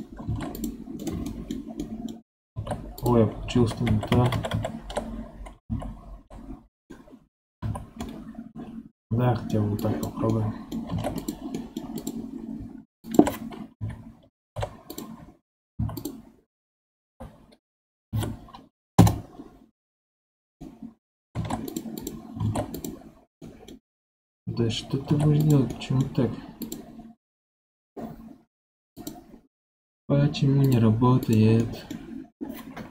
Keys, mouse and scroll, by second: 0.2 ctrl+Tab, 0.5 click, 0.9 right click, 1.2-2.4 middle drag, 2.4 ctrl+Tab, 3.5 ctrl+z, 3.8 ctrl+z, 4.0 ctrl+z, 4.2 ctrl+z, 4.4 ctrl+z, 5.6 ctrl+z, 6.8 middle click, 7.5 3, 7.9-9.7 middle drag, 9.7 click, 10.2 middle click, 10.8 ctrl+Tab, 11.1 click, 11.5 middle click, 11.9 click, 13.0 shift+drag, 13.7 KP_7, 14.3 ctrl+Tab, 15.7 3, 15.9 click, 17.0 l, 18.1 F3, 20.5 middle click, 21.3 ctrl+Tab, 21.9 click, 22.3 ctrl+Tab, 23.3-25.0 middle drag, 25.0 ctrl+Tab, 25.6-26.5 middle drag, 26.5 click, 28.9-31.5 drag, 31.5-32.9 middle drag.